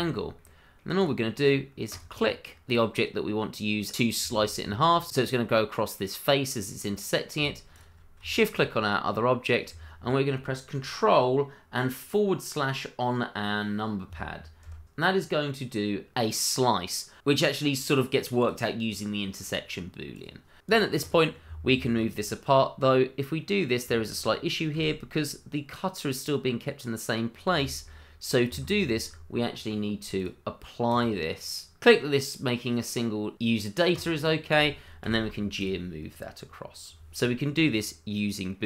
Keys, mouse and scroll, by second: 1.9 click, 2.3 middle click, 4.1 scroll up 1, 4.4 shift+z, 4.6 middle click, 5.5 shift+middle click, 5.7 middle click, 7.7 shift+click, 8.3 shift+middle click, 8.3 middle click, 8.5 shift+middle click, 9.1 middle click, 14.6 ctrl+/, 18.4 click, 20.6 click, 21.1 double click, 21.8 middle click, 24.7 g, 28.5 Escape, 30.1 click, 33.9 click, 36.0 middle click, 37.4-37.8 scroll down 1, 37.8 middle click.